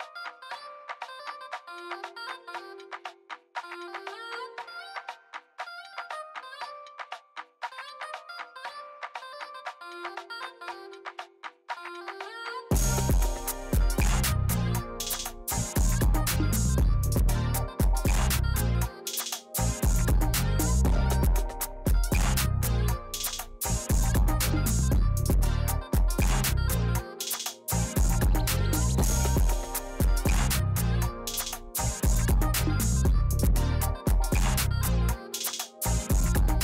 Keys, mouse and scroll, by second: 12.3 middle click, 12.5 middle click, 12.7 middle click, 13.0 middle click, 13.3 middle click, 13.8 middle click, 15.2 middle click, 15.4 middle click, 15.7 middle click.